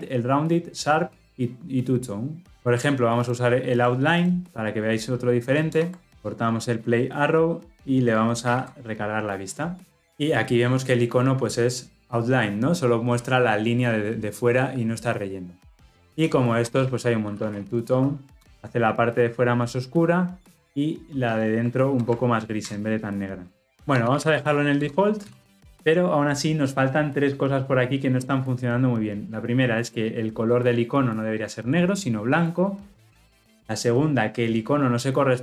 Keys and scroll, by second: 5.7 alt+Return, 18.4 Return, 22.8 alt+Return, 24.8 Return, 25.3 ctrl+alt+l, 25.4 ctrl+alt+o.